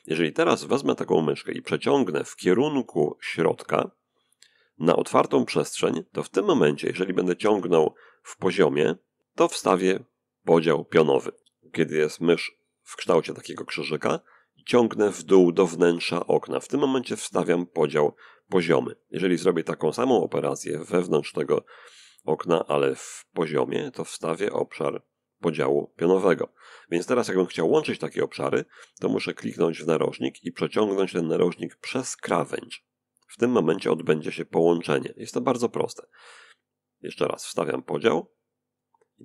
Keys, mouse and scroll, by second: 6.0-7.1 drag, 6.5 Escape, 7.7-11.3 drag, 13.5-18.4 drag, 20.8-26.1 drag, 33.1-34.6 drag, 36.3-38.1 drag.